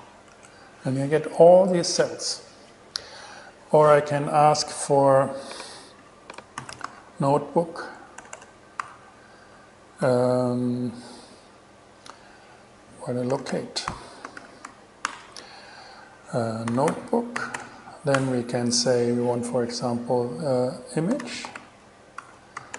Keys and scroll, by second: 0.1 alt+6, 0.5 alt+shift+Return, 1.3 shift+Return, 6.6-9.0 typing, 13.3-15.1 typing, 15.3 alt+5, 16.7-18.4 typing, 21.1-22.7 typing.